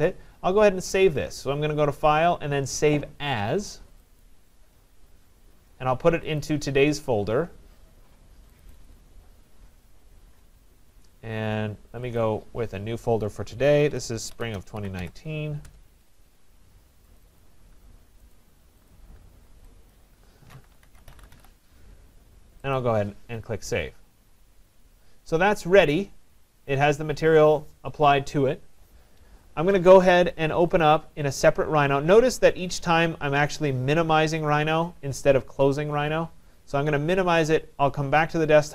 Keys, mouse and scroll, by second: 1.1 click, 4.2 click, 6.4 click, 8.7 click, 8.9 click, 12.2 click, 13.8-15.8 typing, 17.2 click, 17.4 click, 18.4 click, 18.9 click, 19.9 click, 20.5-22.0 typing, 22.8 click, 27.3 click, 30.8 click, 33.0 click, 34.5 click, 37.5 click.